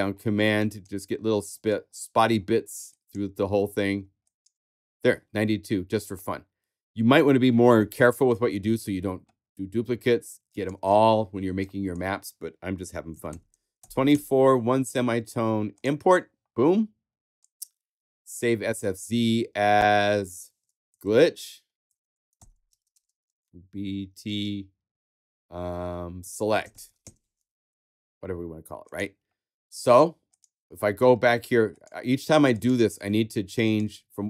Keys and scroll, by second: 12.9-14.1 typing, 20.6-23.7 typing, 26.0-27.1 typing.